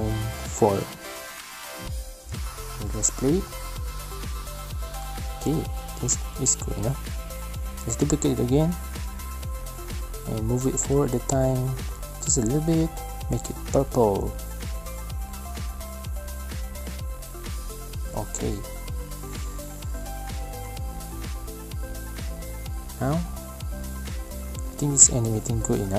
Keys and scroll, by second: 2.0 space, 3.5 space, 6.3 ctrl+c, 6.4 ctrl+v, 21.7 space, 23.8 space.